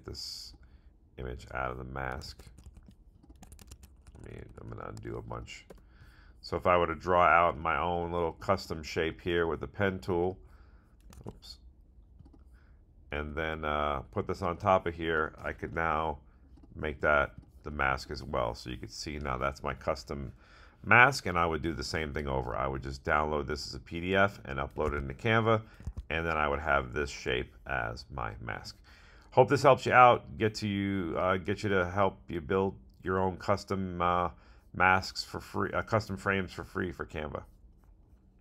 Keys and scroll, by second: 2.2 super+z, 11.1 super+z, 24.8 super+Tab, 25.1 super+Tab, 26.2 super+Tab.